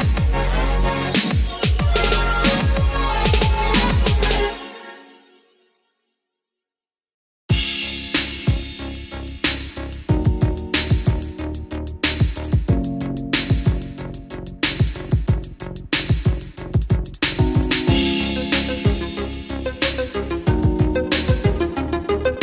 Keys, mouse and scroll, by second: 9.6-10.2 scroll up 1, 11.5 click, 17.2 right click, 20.3 click, 22.3 right click.